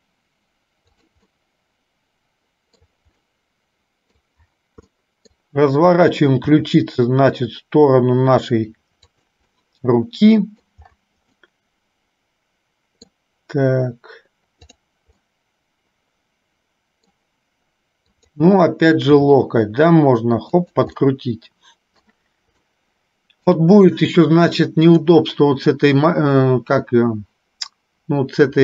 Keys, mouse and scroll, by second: 1.5-3.0 middle drag, 3.5 middle click, 4.3 scroll down 1, 5.0 middle click, 6.6 r, 9.6-10.8 middle drag, 11.5-13.1 middle drag, 15.4-17.3 middle drag, 18.4 click, 19.3 g, 21.1-22.4 middle drag, 22.9 middle click, 25.0 click.